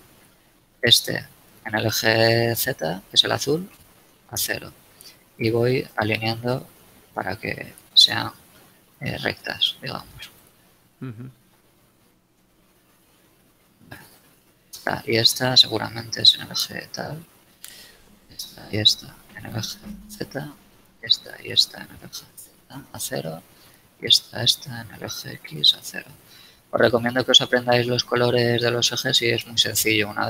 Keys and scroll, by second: 0.4 a, 2.6 s, 3.6 0, 4.7 a, 7.0 s, 7.3 z, 7.8 0, 8.1 Return, 8.3 a, 12.3 shift+Return, 16.0 s, 16.3 0, 16.6 Return, 17.0 a, 19.6 shift+z, 20.0 shift+Return, 22.3 z, 22.6 Return, 25.0 s, 25.3 x, 25.6 Return, 26.3 a.